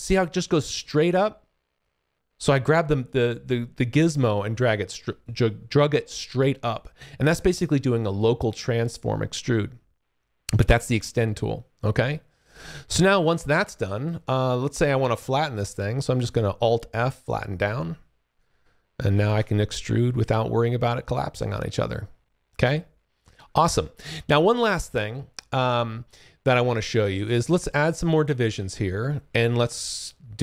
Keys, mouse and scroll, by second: 16.1 alt+f, 17.2 click, 18.3 alt+click, 19.2 shift+f, 19.4 click, 23.6 alt+click, 24.9-25.4 alt+scroll up 1, 26.4 alt+click, 27.0-29.2 scroll up 20, 29.4 ctrl+shift+click.